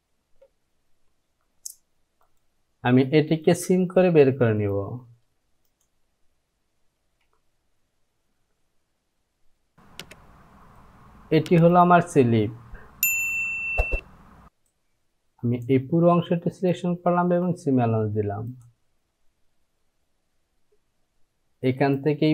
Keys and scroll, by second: 8.0 j, 13.5 Down, 13.8 Down, 17.3 Down, 17.5 Down, 17.7 Down.